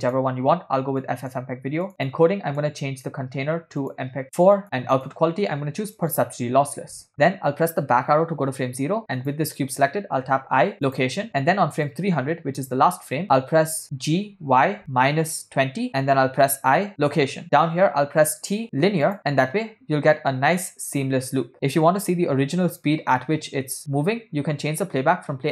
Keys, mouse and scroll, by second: 1.1 click, 1.9 click, 3.8 click, 4.2 click, 4.9-6.5 drag, 7.2 ctrl+middle click, 9.2 Left, 9.5 click, 10.7 i, 12.1 click, 13.2 Left, 15.5 g, 16.9 i, 18.3 t, 19.3 space, 21.7 click, 24.9 click.